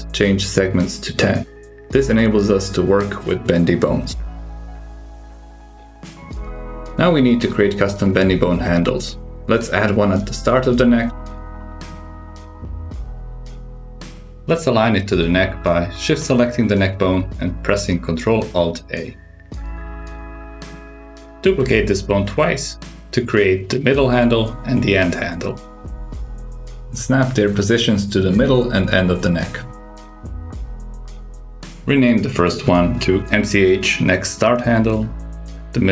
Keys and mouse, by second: 3.7 click, 7.8 super+KP_6, 10.4 click, 10.9 shift+s, 12.5 shift+a, 12.9 click, 13.4 s, 15.7 ctrl+alt+s, 17.2 shift+click, 18.3 ctrl+alt+a, 19.8 click, 21.1 shift+d, 22.2 shift+d, 23.8 click, 24.3 shift+s, 25.8 click, 26.2 shift+s, 27.4 click, 27.4 shift+s, 27.9 shift+s, 29.2 click, 29.7 shift+s, 32.0 click, 32.7 F2, 35.5 click, 35.7 F2.